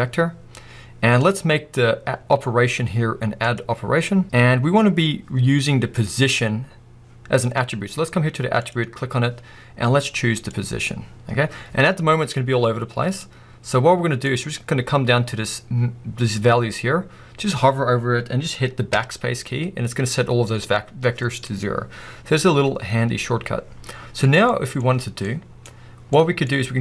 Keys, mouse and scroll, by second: 11.3-12.9 scroll down 1, 19.0 BackSpace, 20.9-23.6 scroll down 1, 25.0 middle click, 26.4 middle click.